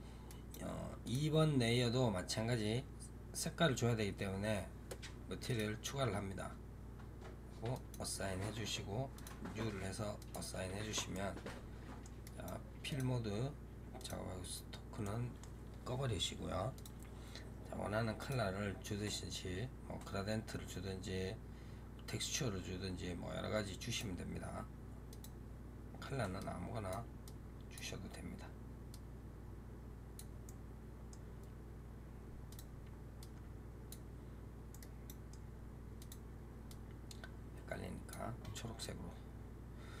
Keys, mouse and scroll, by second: 0.1-0.9 right drag, 0.9 click, 5.3 click, 7.6 click, 9.0 click, 10.0 click, 11.0-12.1 middle drag, 12.1-12.8 right drag, 12.8 click, 13.8 click, 14.9-16.6 middle drag, 16.6 click, 18.1-21.1 drag, 25.0 click, 30.3-32.4 middle drag, 32.4 click, 34.6-35.9 middle drag, 35.9 click, 38.7-40.0 middle drag.